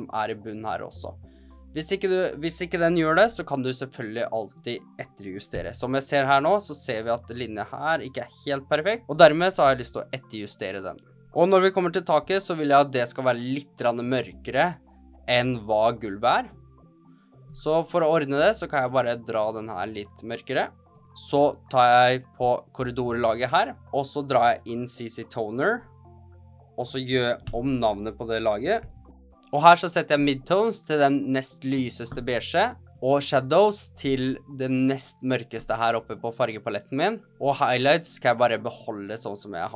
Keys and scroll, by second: 3.2 h, 5.4 g, 9.0 h, 9.4 g, 10.3 h, 11.0 g, 12.2 v, 27.4 Return, 28.5-29.6 typing.